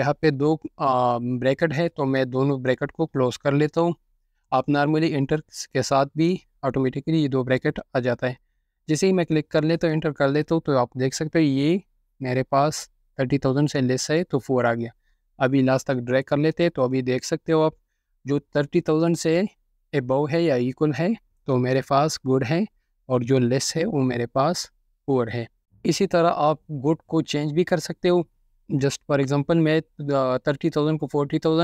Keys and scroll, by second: 4.3-4.9 typing, 8.6 Return, 26.7 Return.